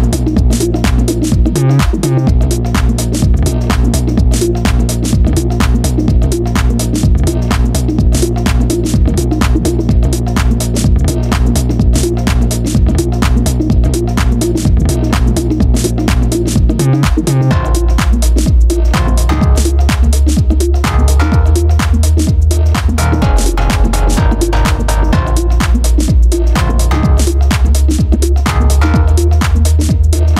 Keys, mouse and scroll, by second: 2.5-5.5 drag, 6.8-9.0 drag, 13.4-16.0 drag, 16.9-17.7 scroll down 1, 17.7-19.1 scroll down 1, 19.1-19.9 scroll up 2, 19.9-22.1 scroll down 1, 22.1 scroll down 1, 22.2-25.3 drag, 27.6-28.8 shift+middle drag, 28.8-29.3 scroll up 1, 29.3-30.2 shift+middle drag, 30.2 drag.